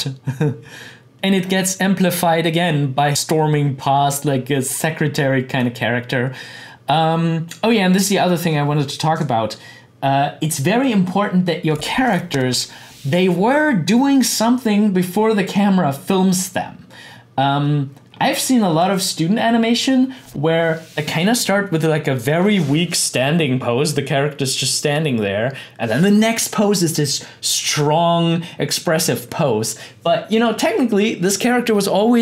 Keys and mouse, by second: 1.1 click, 5.6-9.8 drag, 18.7 click.